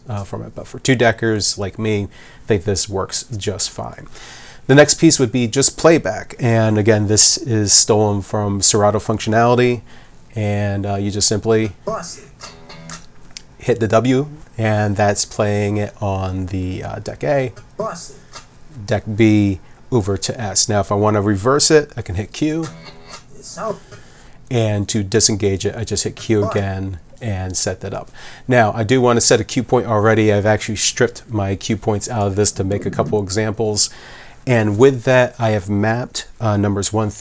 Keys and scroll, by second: 11.6 w, 12.9 w, 17.5 s, 18.3 s, 22.1 q, 22.6 w, 23.9 w, 25.4 q, 26.0 w, 26.5 w.